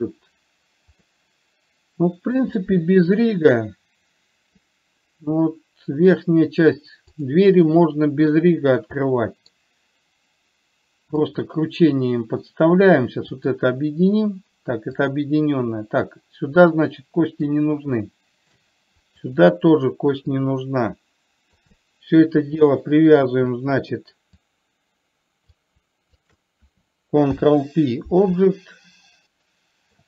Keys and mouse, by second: 1.4-2.8 middle drag, 7.9-8.7 middle drag, 9.5 middle click, 11.7-13.2 drag, 13.9 click, 15.4-17.9 drag, 18.4-18.9 shift+middle drag, 20.7-22.0 drag, 22.2-23.5 middle drag, 25.0 click, 26.5 shift+click, 27.7 ctrl+p, 29.4-30.0 middle drag.